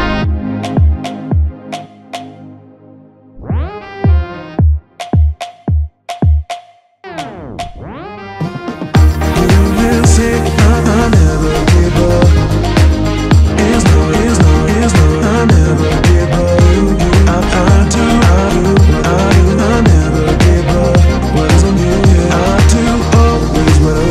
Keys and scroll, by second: 3.2 Return, 8.5 Return, 11.8 Escape, 12.2 alt+a, 12.7 Escape, 15.4 Return, 19.6 F10, 20.2 Return, 22.0 F10, 22.5 Return.